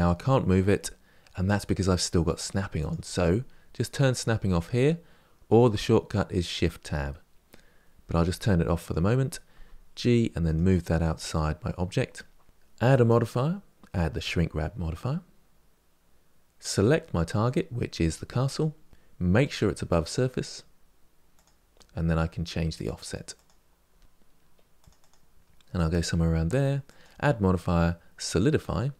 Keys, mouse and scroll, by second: 8.6 click, 9.4 g, 10.7-12.5 middle drag, 12.5 scroll down 3, 16.6 click, 19.3-22.3 drag, 22.6-23.7 drag, 24.0 middle click, 24.7-26.0 drag.